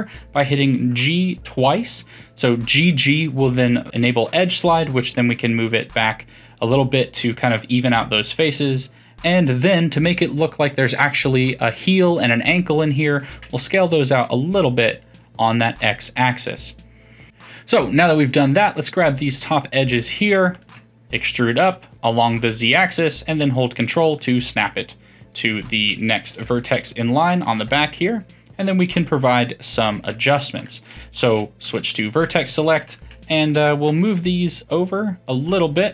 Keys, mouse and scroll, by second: 5.9-11.1 middle drag, 13.2 s, 15.2-18.7 middle drag, 18.7 click, 19.1 shift+click, 19.5 shift+drag, 19.9 shift+click, 20.2 shift+click, 20.5 shift+click, 21.1 e, 24.2-25.8 middle drag, 25.8 click, 26.2 f, 26.4-27.3 middle drag, 27.3 click, 27.6 f, 27.8-30.6 middle drag, 30.6 2, 31.2 1, 31.6 click, 31.9-32.7 middle drag, 32.7 shift+click, 33.0-33.9 middle drag, 33.9 g.